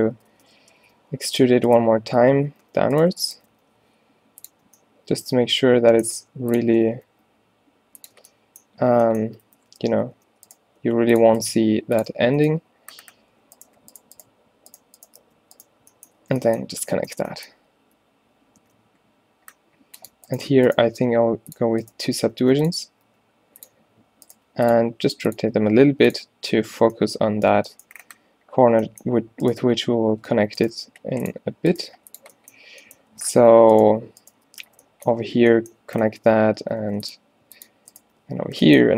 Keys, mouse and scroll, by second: 0.4 shift+Tab, 0.9 e, 2.5 ctrl+z, 2.8 ctrl+z, 3.6 e, 4.6 z, 6.6 g, 6.8 r, 8.2 Tab, 9.0 a, 9.2 Tab, 10.2-12.2 typing, 15.3 f, 16.3 a, 18.7 ctrl+r, 21.0 g, 22.2 g, 23.1 r, 24.4 g, 25.0 r, 25.5 g, 29.7 g, 30.8 g, 31.9 g, 33.0 click, 33.2 a, 34.7 f, 35.4 a, 36.8 ctrl+r, 38.2 f.